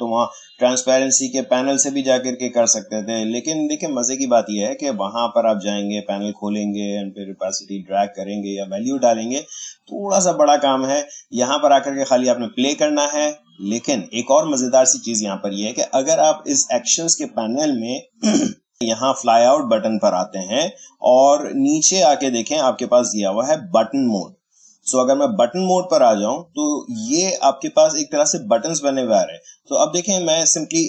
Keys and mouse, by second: 1.3 click, 16.4-19.1 drag, 19.2 click, 24.1-30.8 drag.